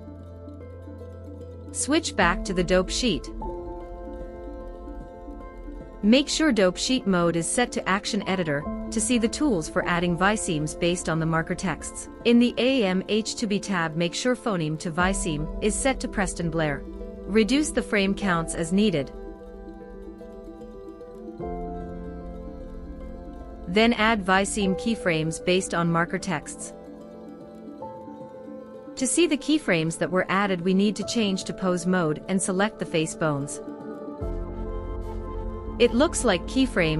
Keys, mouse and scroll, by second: 1.9-4.2 drag, 5.1 n, 7.1-8.3 drag, 12.6-15.1 drag, 16.1-17.0 drag, 17.6-18.8 drag, 19.4-20.3 drag, 20.9-22.1 drag, 31.0-32.3 drag, 34.4-35.2 drag.